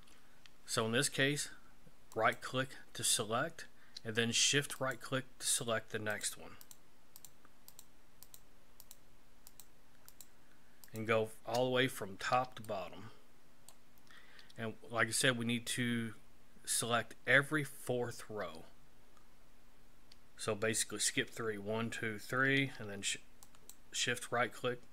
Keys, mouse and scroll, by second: 2.1 right click, 4.8 shift+right click, 5.5 shift+right click, 6.1 shift+right click, 6.6 shift+right click, 7.1 shift+right click, 7.7 shift+right click, 8.2 shift+right click, 8.8 shift+right click, 9.5 shift+right click, 10.1 shift+right click, 10.8 shift+right click, 12.0-12.4 scroll up 1, 12.6 shift+middle click, 23.4 shift+right click.